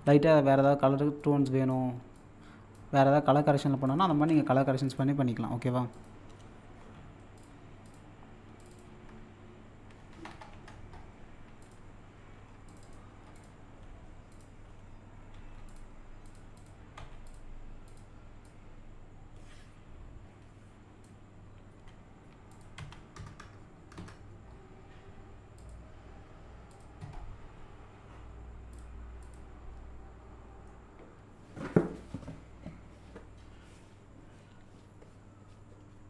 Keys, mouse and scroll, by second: 1.2-4.1 drag, 4.1 ctrl+z, 4.9 click, 7.4 click, 11.6 click, 15.7-22.5 drag, 22.5 click, 22.8 1, 25.6 click, 28.7 click, 30.7-32.8 middle drag, 32.8-33.9 scroll up 1.